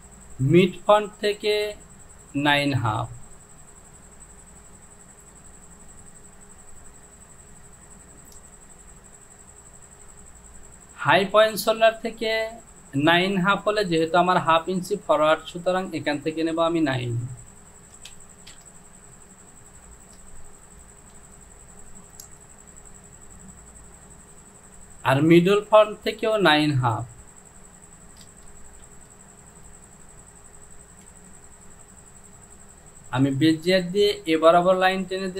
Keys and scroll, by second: 18.2 KP_9, 18.6 Return, 28.4 space, 28.9 space, 31.1 ctrl+z.